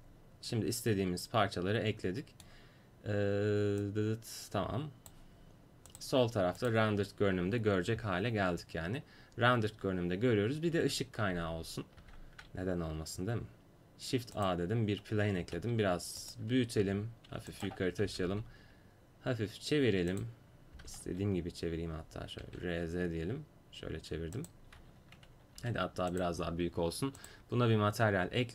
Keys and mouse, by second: 0.0 click, 3.8-5.7 drag, 5.9-7.7 drag, 12.0 shift+a, 15.5 s, 16.9 g, 18.1 r, 20.8 r, 21.1 z, 22.5 r, 25.6 s, 27.3-28.5 drag.